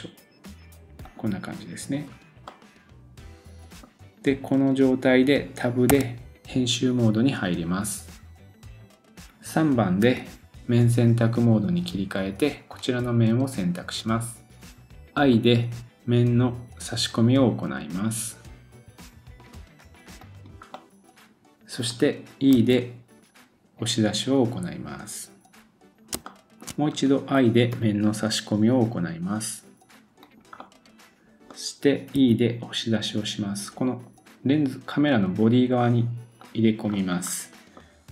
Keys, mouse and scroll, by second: 2.0-2.5 scroll down 1, 2.5 middle click, 12.7 click, 20.7 middle click, 25.6 middle click, 25.6-26.1 scroll down 2, 26.9-27.3 scroll up 1, 27.7 i, 30.6 middle click, 32.1 e, 36.9-38.1 scroll up 1.